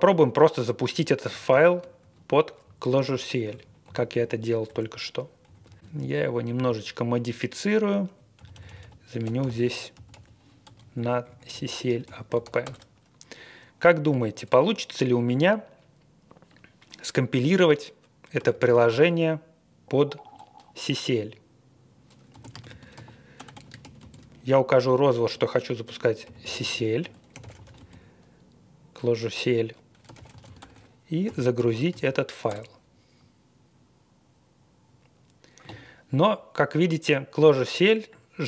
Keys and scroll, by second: 1.5 ctrl+l, 2.0 Page_Up, 2.6 Home, 2.9 Left, 3.0 Left, 3.0 Up, 3.8 Left, 4.2 Up, 4.7 Up, 5.4 Down, 5.6 Down, 5.7-6.4 typing, 6.5 Down, 7.2 Right, 7.7-8.1 Right, 8.4-12.9 typing, 10.6 Escape, 10.8 Right, 10.9 Right, 11.1 Right, 11.2 Right, 11.4 Right, 17.4 Up, 18.4 ctrl+a, 18.7 alt+d, 22.1-24.0 typing, 26.0-28.0 typing, 29.8-32.4 typing, 32.5 Return.